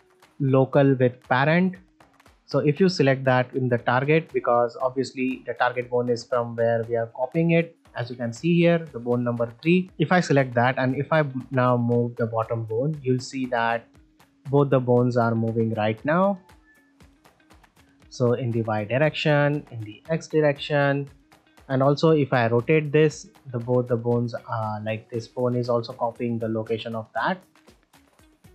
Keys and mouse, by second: 4.0 middle click, 10.4 click, 10.7 middle drag, 11.7 click, 14.2-14.7 middle drag, 15.7 click, 18.9 middle click, 20.9 middle drag, 22.0 r, 25.6 r, 27.8 drag.